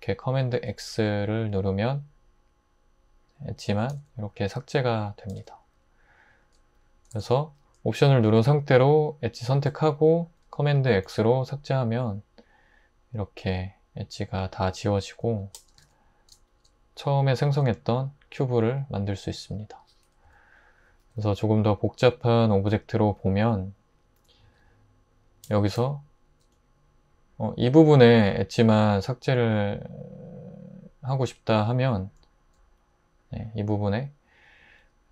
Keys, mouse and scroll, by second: 0.5 super+x, 3.9 super+x, 5.3 super+x, 7.1 super+x, 11.0 super+x, 15.8 super+x, 19.3 Tab, 20.3 x, 21.0 shift+a, 24.5 Tab.